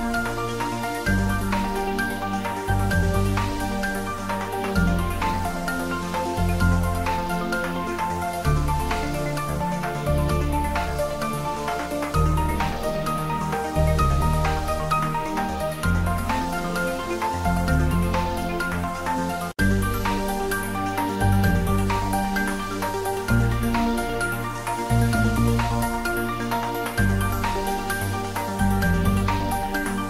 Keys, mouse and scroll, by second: 0.0-1.0 typing, 2.2 Return, 2.5 ctrl+s, 3.0-4.4 middle drag, 4.2-5.4 typing, 5.5 Right, 6.4 Return, 6.9-9.1 middle drag, 9.1 shift+click, 9.5 shift+middle click, 10.5 shift+click, 11.4 ctrl+middle click, 12.3 click, 12.8 middle click, 13.7 s, 14.5 click, 14.7 ctrl+z, 15.2 shift+click, 16.1 s, 17.7 click, 18.0 middle click, 19.0-20.7 middle drag, 20.7 ctrl+middle click, 21.1 ctrl+middle click, 21.8 shift+middle click, 22.3 ctrl+middle click, 22.6 shift+middle click, 23.8 s, 25.1 click, 26.0 s, 26.6 click, 27.0 ctrl+middle click, 27.4 shift+middle click, 27.8 ctrl+middle click, 28.2 click, 28.9 ctrl+z, 29.5-30.0 typing.